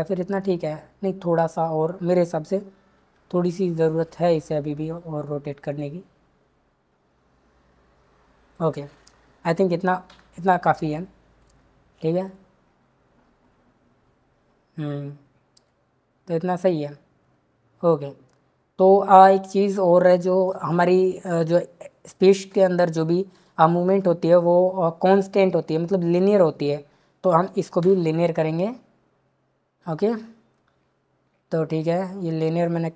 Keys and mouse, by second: 3.1 r, 5.8 click, 10.1 i, 11.4 click, 15.6 click, 27.8 t.